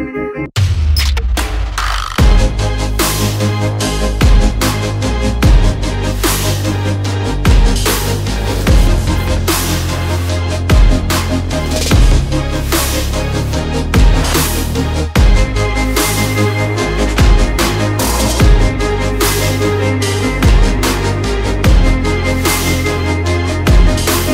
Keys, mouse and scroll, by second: 1.1 8, 1.3 0, 1.8 click, 3.1 click, 3.6 shift+click, 3.6 alt+scroll down 1, 4.1-4.4 alt+scroll up 1, 5.1 click, 7.3 alt+scroll up 1, 8.5 click, 11.0-11.5 alt+scroll down 1, 11.5-11.8 alt+scroll up 1, 12.1 click, 12.9 double click, 13.2 click, 13.6-13.9 alt+scroll down 1, 13.9 alt+scroll up 1, 14.7 alt+scroll up 1, 15.2 alt+scroll down 1, 15.8 alt+scroll up 1, 17.4 alt+scroll down 1, 19.0 click, 23.7 shift+Down.